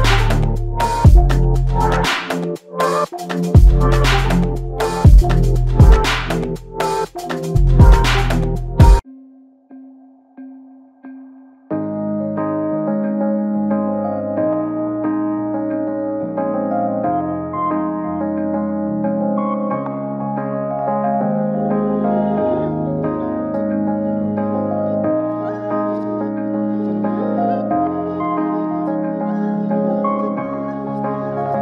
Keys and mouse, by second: 6.3 double click, 7.9 typing, 9.0 double click, 19.1 double click, 21.6 f, 24.3 ctrl+alt+click, 27.3 alt+click, 30.9 shift+click.